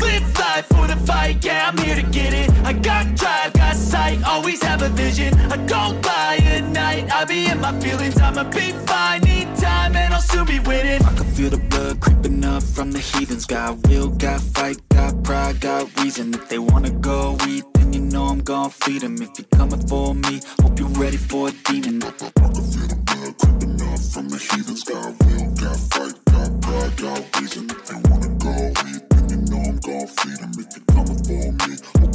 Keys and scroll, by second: 17.1 space, 20.7 space, 23.1 space.